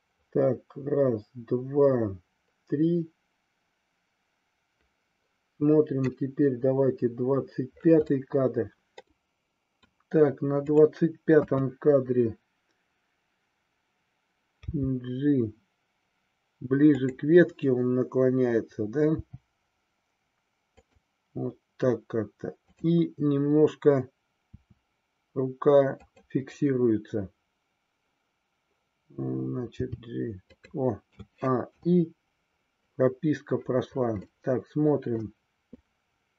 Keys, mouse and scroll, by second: 8.2 middle click, 9.1 middle click, 11.8 KP_3, 14.7 g, 17.0 click, 19.1 g, 20.9 click, 22.6-24.0 drag, 24.4 r, 26.0 click, 29.8 g, 30.5 click, 31.0 a, 31.8 i, 34.3 middle click, 35.7-36.3 drag.